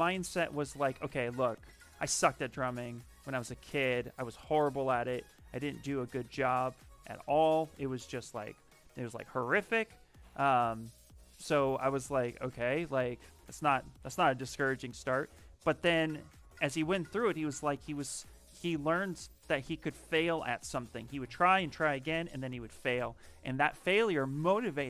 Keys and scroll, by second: 1.9 w, 5.5 q, 6.6 s, 10.3 shift+f.